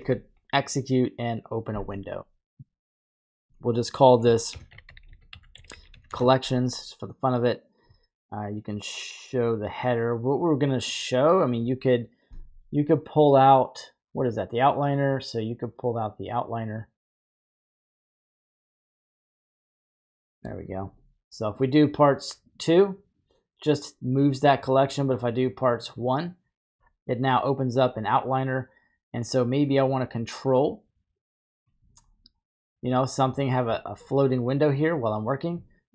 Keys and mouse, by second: 3.2 click, 5.0 l, 10.7-19.8 drag, 21.6-22.6 drag, 25.0-26.1 drag, 34.7 click, 35.2 right click.